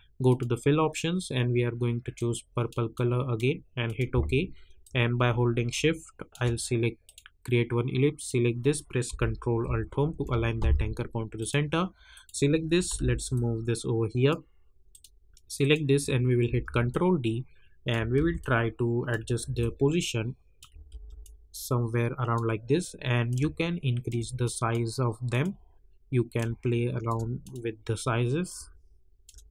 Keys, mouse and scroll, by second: 10.0 ctrl+alt+Home, 11.3 click, 12.8 v, 13.3-14.9 drag, 16.4 ctrl+d, 16.9 click, 18.1 ctrl+d, 18.4 ctrl+click, 19.4 ctrl+d, 19.5-20.9 ctrl+drag, 20.9 ctrl+d, 21.2-29.5 drag.